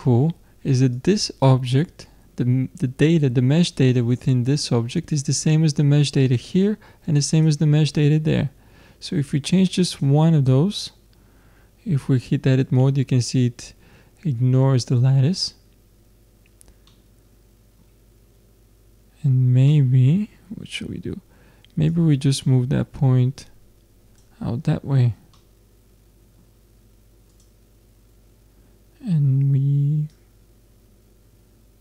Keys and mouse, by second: 0.9-2.9 drag, 6.2-9.2 drag, 9.2 middle click, 9.9-11.7 drag, 10.5 Tab, 16.9 middle click, 21.9-23.9 drag, 25.4-27.3 middle drag, 27.3 click, 27.8-30.1 middle drag, 30.1-31.8 drag.